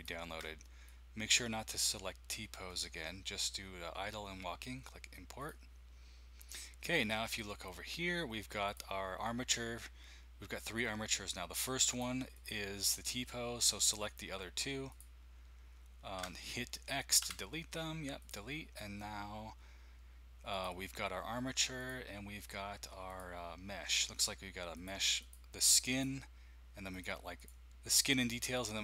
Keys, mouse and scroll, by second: 0.0-1.4 drag, 5.4 click, 6.8-8.6 scroll down 1, 8.6-11.2 middle drag, 11.9 click, 12.3-13.9 drag, 17.2 x, 21.8 click, 23.1-24.9 drag, 25.2 click, 25.6 click, 25.9 click, 26.9 click.